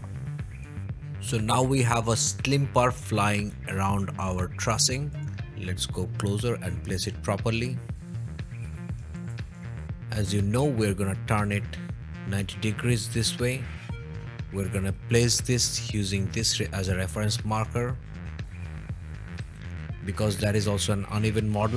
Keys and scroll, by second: 8.3-9.9 typing, 13.8 typing, 15.1 m.